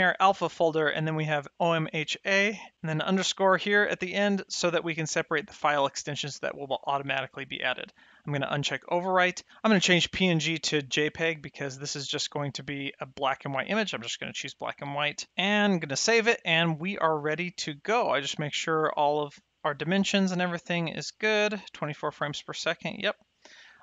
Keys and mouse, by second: 7.9 click, 9.7 click, 10.7 click, 13.5 click, 16.0 ctrl+s.